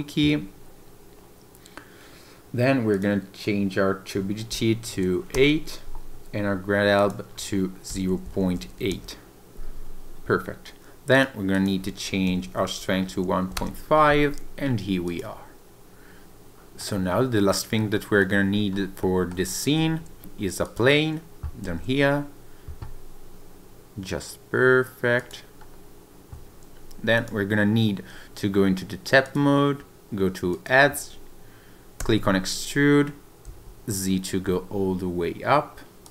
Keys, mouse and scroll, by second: 15.3 click, 16.8 middle click, 17.8 middle click, 18.5-19.0 scroll up 3, 19.0 middle click, 19.4 click, 19.8 shift+a, 20.2 middle click, 21.6 s, 25.2 click, 25.6-26.0 scroll down 2, 26.8 Tab, 27.1 click, 29.2 click, 30.5 click, 32.0 e, 33.4 z, 36.0 click.